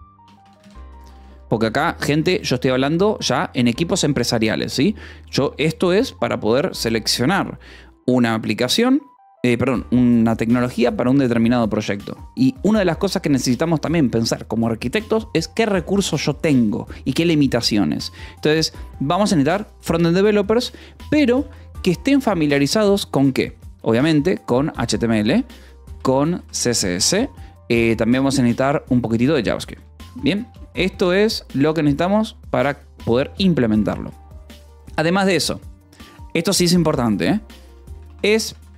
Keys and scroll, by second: 0.0-1.9 typing, 2.2 Escape, 12.2 a, 12.5 space, 21.3 space, 25.0-27.0 typing, 28.9-34.4 typing, 31.9 Escape, 37.8-38.7 typing.